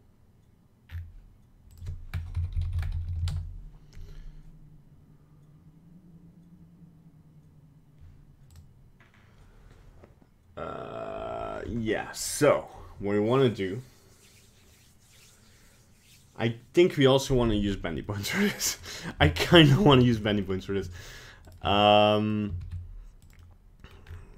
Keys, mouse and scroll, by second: 18.0 middle click, 18.8 right click, 20.0 shift+right click, 20.3 middle click, 20.5 scroll down 2, 21.5 shift+right click, 21.8 middle click, 22.6 shift+d, 23.5 middle click, 23.9 middle click, 24.1-24.3 scroll up 3.